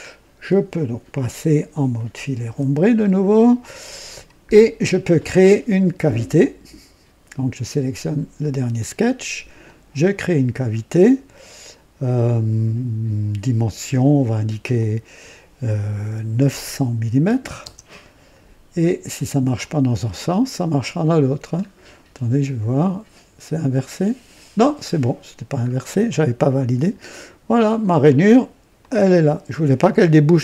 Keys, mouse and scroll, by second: 0.4-1.5 drag, 2.4 &, 3.0 scroll up 1, 3.6-4.2 drag, 4.5-5.0 right drag, 9.6 click, 14.7 click, 16.4 KP_9, 17.2 KP_0, 17.4 KP_0, 17.5 KP_0, 19.5 click, 21.5-21.9 scroll down 1, 23.8 click, 25.6 scroll up 1, 26.0 right click, 28.0 click, 28.8 click.